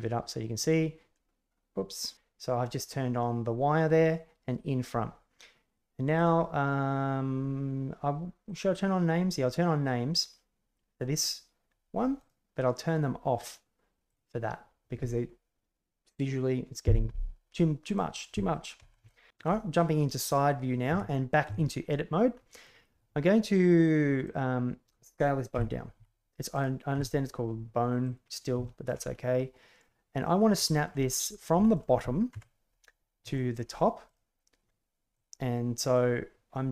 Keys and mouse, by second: 6.2 click, 8.4 click, 12.1 right click, 14.0 click, 17.8 click, 18.7 KP_1, 18.9 KP_3, 19.7-20.6 middle drag, 20.8 Tab, 21.4 Tab, 22.3 middle click, 24.2 right click, 25.5 a, 25.5 s, 25.9 s, 26.5 right click, 28.6 shift+middle drag, 29.8-30.2 middle drag, 30.6 shift+middle click, 31.0-31.4 middle drag, 31.6 shift+middle click, 32.2 KP_1, 33.3 shift+middle drag, 34.0 right click, 35.1-35.9 middle drag.